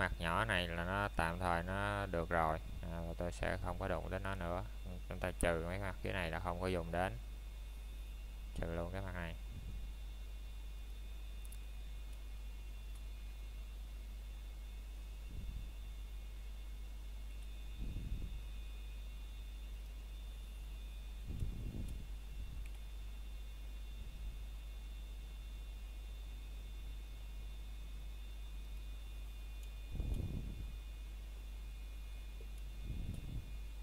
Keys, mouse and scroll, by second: 7.5 middle click, 13.5 middle click, 13.9-14.4 scroll down 1, 14.6 middle click, 15.7 scroll up 1, 16.2 middle click, 16.8 shift+middle click, 17.6 scroll up 1, 22.9 middle click, 23.2 scroll down 1, 24.0 c, 24.3 middle click, 29.8 right click, 30.2 scroll down 1, 30.4 middle click, 30.9-31.3 scroll up 1, 31.3 shift+middle click.